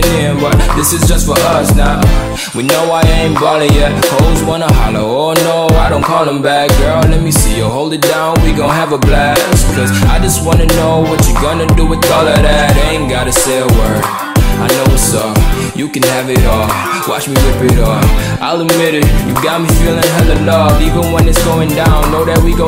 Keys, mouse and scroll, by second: 0.0-1.4 typing, 2.9 Return, 4.8 click, 6.7 F11, 7.3-18.4 drag, 18.4 F11, 18.5 F10, 19.7 click.